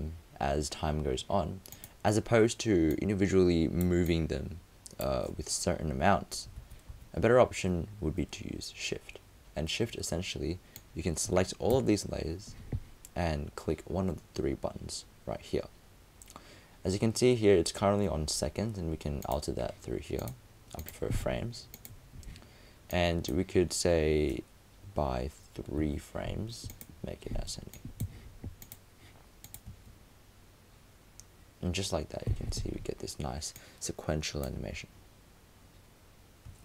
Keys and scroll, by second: 6.6 super+z.